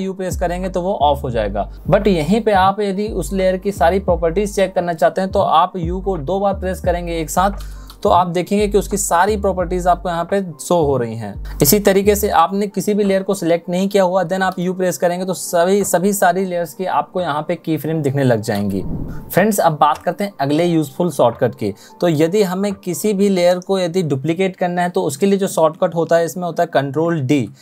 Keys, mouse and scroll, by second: 6.1 u, 26.6 ctrl+d.